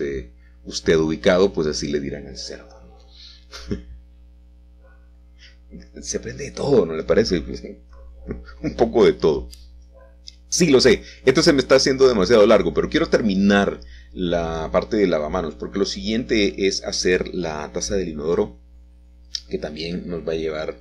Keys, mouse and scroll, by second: 0.1 g, 1.8 Escape, 2.4 Tab, 3.5 Tab, 4.8 1, 6.3 e, 6.6 s, 9.6 click, 10.0 e, 11.9 click, 14.2 alt+shift+click, 16.7 e, 17.2 z, 18.9 click, 19.7 s.